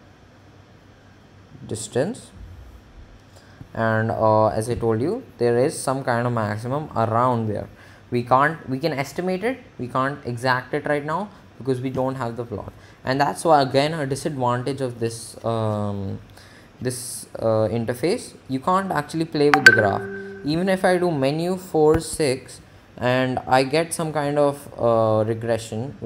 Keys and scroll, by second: 13.7 Menu, 22.5 6.